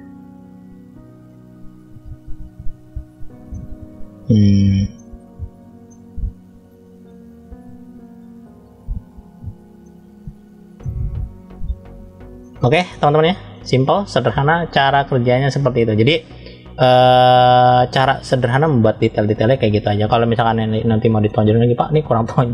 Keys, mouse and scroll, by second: 0.6 click, 1.5 click, 2.1 click, 3.3-4.4 middle drag, 4.4-4.8 scroll down 1, 4.8 middle click, 5.7-7.0 middle drag, 7.5 click, 9.2-9.7 scroll down 1, 9.7 middle click, 9.7-10.2 scroll down 1, 11.0 scroll up 1, 12.2 shift+middle click, 13.1 scroll up 1, 13.4 middle click, 15.4 middle click, 16.9 shift+middle click, 17.9 middle click, 19.1 scroll up 1, 20.6 middle click, 21.8 middle click.